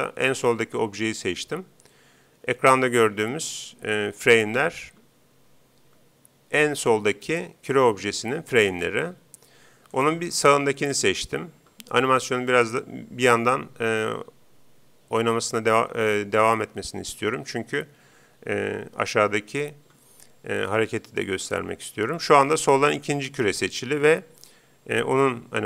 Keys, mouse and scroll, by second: 9.9-11.6 right drag.